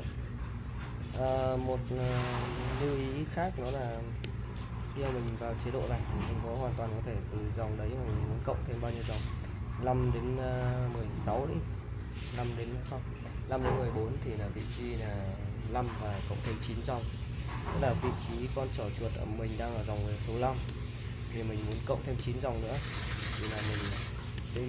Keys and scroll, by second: 0.0-1.6 typing, 5.0 shift+;, 19.0 Escape.